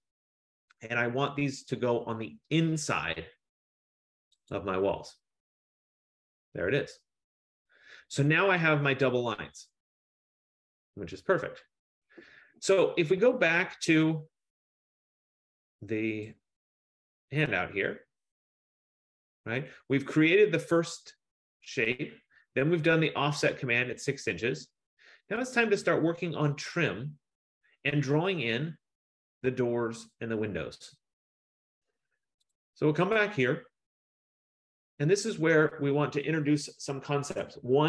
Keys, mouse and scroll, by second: 0.8 Return, 1.1 F15, 4.7 click, 8.5 Return, 10.6 Return, 16.7 click, 18.0 scroll, 18.2 middle click, 19.1 middle click, 28.7 middle click, 32.6 click, 34.0-34.7 scroll.